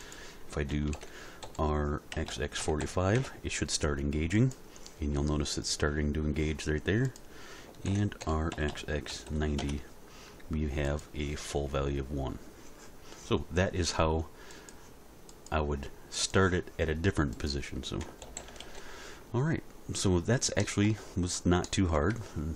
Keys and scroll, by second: 0.9 alt+r, 2.1 x, 2.6 4, 2.8 5, 3.1 Return, 7.9 alt+r, 8.5 x, 9.1 9, 9.3 0, 9.6 Return, 18.2 alt+r, 18.4 alt+g, 18.6 alt+s.